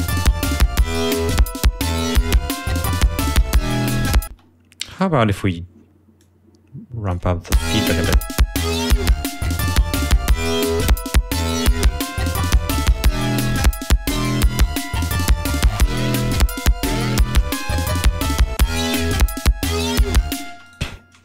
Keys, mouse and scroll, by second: 2.1 ctrl+scroll up 2, 2.9 ctrl+scroll down 2, 4.4 space, 4.9 click, 6.3-7.4 drag, 7.6 l, 18.7 click, 20.6 space, 20.8 right click.